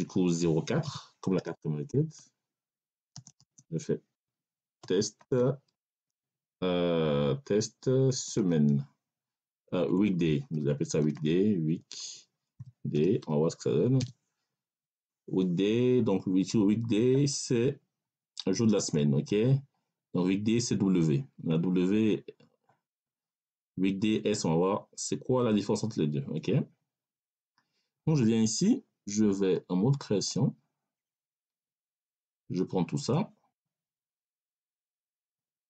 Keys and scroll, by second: 0.7 0, 1.2 4, 3.0 space, 3.2 6, 3.3 space, 4.7-5.8 typing, 8.0 s, 8.2 e, 9.6 BackSpace, 10.4 w, 10.9 e, 12.5 k, 12.8 d, 13.1 a, 13.9 y, 14.8 Return.